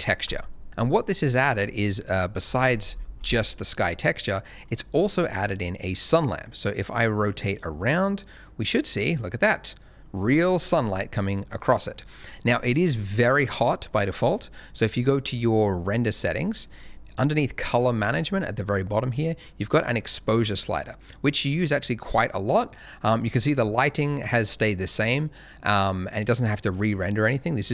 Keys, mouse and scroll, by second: 0.2 click, 2.4 scroll down 1, 3.0 middle click, 4.5-6.2 scroll up 1, 6.2 click, 10.4 scroll up 1, 11.0 middle click, 11.3 scroll up 1, 11.3 middle click, 15.3 click, 15.9 middle click, 19.6 click.